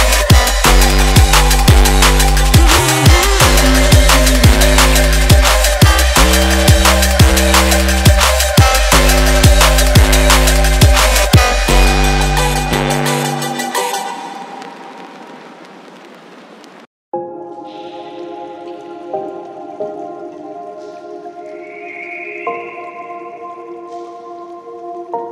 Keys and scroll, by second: 10.3 KP_2, 10.5 KP_0, 11.7 KP_7, 12.2 KP_8.